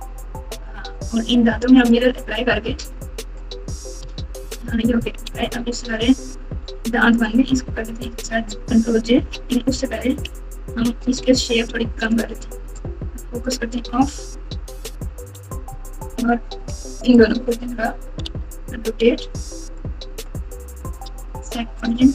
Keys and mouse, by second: 1.8 click, 4.4 ctrl+a, 5.4 Tab, 6.0 Tab, 7.1 click, 9.1 KP_3, 10.1 KP_1, 12.0 click, 13.2 KP_Divide, 15.0 KP_Subtract, 15.2 KP_Subtract, 17.3 drag, 18.2 r.